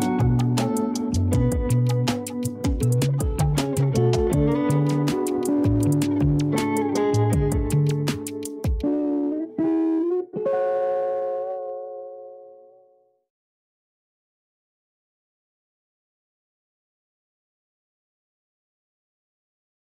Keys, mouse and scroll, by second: 0.3 click, 2.2-3.5 drag, 3.5 scroll up 1, 4.4 a, 4.7 a, 5.1 KP_0, 6.5 click, 7.0 g, 10.7-11.1 scroll up 6, 11.5-13.5 shift+middle drag, 13.5 a, 13.7 a, 19.0 alt+shift+middle click, 19.7 scroll down 1.